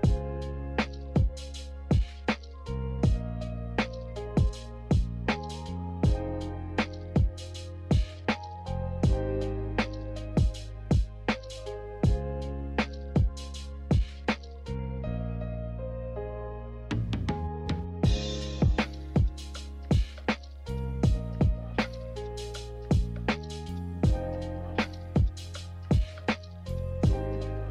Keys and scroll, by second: 3.1 n, 4.1 a, 6.0 b, 7.5-8.4 typing, 13.2 z.